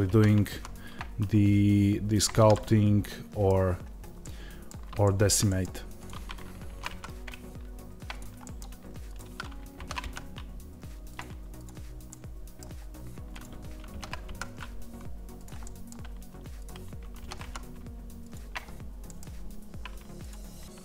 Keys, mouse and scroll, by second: 2.1 click, 2.4-5.8 middle drag, 5.8 click, 6.5 ctrl+b, 8.0 click, 8.3 middle click, 8.9 click, 9.6 ctrl+b, 11.0 click, 11.9-13.2 middle drag, 12.5-13.2 scroll down 1, 13.2 click, 13.8 ctrl+b, 15.3 click, 15.5 middle click, 16.4 click, 17.1 ctrl+b, 18.2 click, 18.9-20.1 middle drag, 20.1 click.